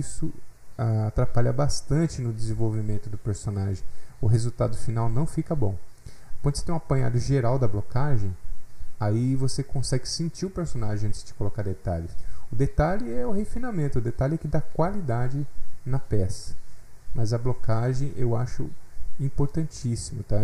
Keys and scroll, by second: 7.9 F8, 8.0 alt+Tab.